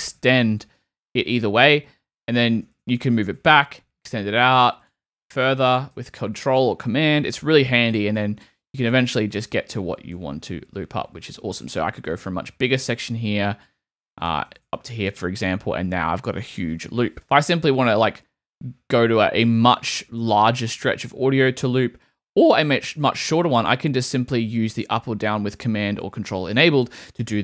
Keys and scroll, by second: 1.7 shift+super+Right, 6.2 super+Right, 7.0 super+Right, 8.4 shift+Left, 10.2 super+Left, 14.3 super+Left, 17.8 super+Up, 22.3 super+Down.